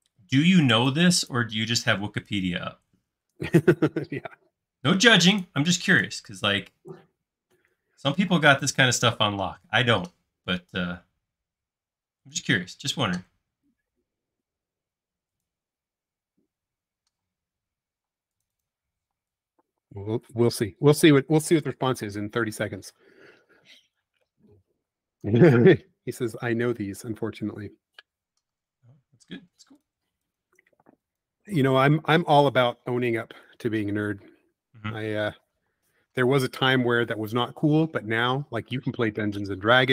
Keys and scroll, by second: 0.1 Left, 3.2 Escape, 4.6 Left, 8.3 m, 17.2 p, 18.1 space, 19.0 p, 20.2 typing, 24.6 space, 25.4 p, 28.3 typing, 30.5 space, 31.7 m, 35.7 alt+p, 39.0 space.